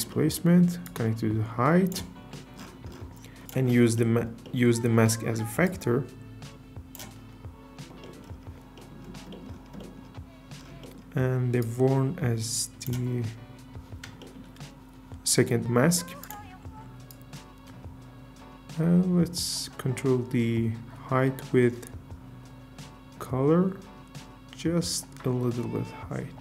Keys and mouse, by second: 0.1 middle click, 0.8 drag, 5.6 click, 11.6 click, 16.2 click.